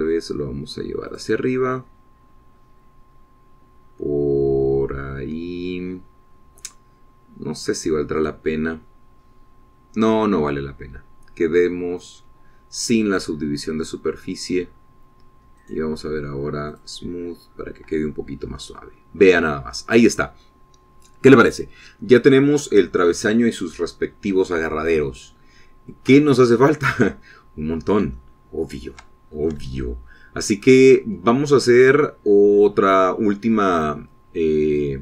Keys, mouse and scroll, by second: 1.0-1.3 scroll down 1, 2.3 click, 3.6-4.0 scroll up 2, 9.5 click, 11.7 scroll up 2, 13.3 click, 14.2-14.8 scroll down 4, 15.1-15.8 scroll up 2, 16.1 scroll down 2, 16.9 right click, 18.0 right click, 19.0-19.5 scroll down 2, 19.7 scroll down 2, 20.1-21.2 middle drag, 21.2-25.4 drag, 27.6-30.5 shift+middle drag, 30.6-30.9 shift+scroll up 3, 31.1-33.3 shift+drag.